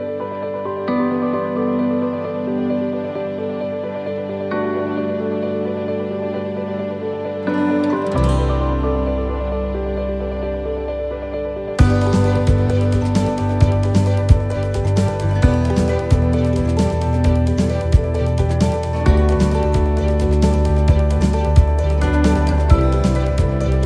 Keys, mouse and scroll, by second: 0.9 middle click, 1.1 shift+middle click, 1.1 scroll down 3, 1.3-1.8 scroll up 1, 1.9 middle click, 1.9-2.6 scroll up 1, 4.4-5.0 scroll up 3, 5.0 shift+middle click, 5.0 right click, 5.0 scroll down 2, 8.4 click, 8.4 shift+d, 16.7 shift+middle click, 17.9 shift+middle click, 18.4-19.2 scroll up 3, 18.8 middle click, 19.5-19.8 scroll down 1, 20.1 shift+middle click, 21.3 click, 23.1 click.